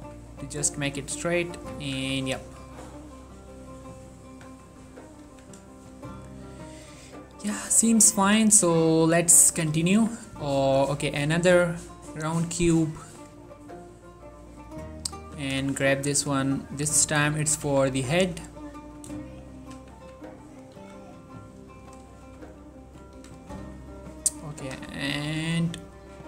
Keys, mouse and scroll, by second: 0.0-0.1 typing, 0.2-1.5 scroll up 1, 1.5 click, 1.7 z, 1.9 Tab, 2.4-2.9 ctrl+middle drag, 2.9 click, 3.7-4.6 middle drag, 5.4 1, 8.9 shift+middle click, 10.1 shift+a, 10.8 click, 15.3 g, 15.7 z, 16.2 click, 16.9 s, 17.4 click, 17.8 z, 18.1-18.4 scroll up 1, 18.7 ctrl+middle click, 19.7 g, 20.0 z, 20.6 click, 20.9 s, 21.9 click, 22.2 shift+middle click, 22.6-23.7 ctrl+middle drag, 23.7 x, 24.7 g, 25.0 z, 25.6 click.